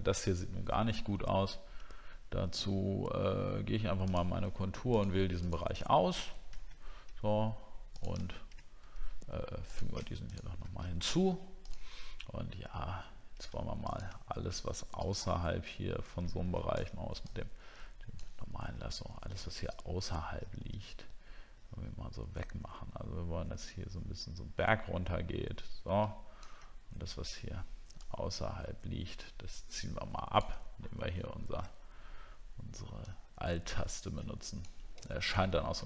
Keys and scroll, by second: 6.0 alt+scroll down 1.